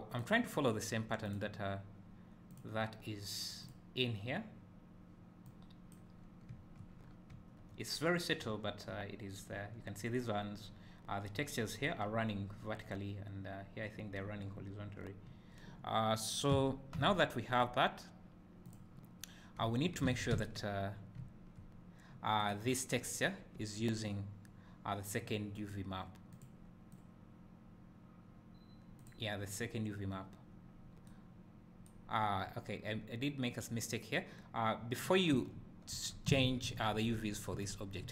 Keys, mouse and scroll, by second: 3.7-18.7 drag, 16.6 Tab, 19.4 scroll down 1, 19.6 `, 20.1 alt+a, 20.4 `, 22.5 click, 30.7 scroll up 1, 32.9 scroll up 1, 33.6 scroll down 1, 35.4 Tab, 36.5 ctrl+z.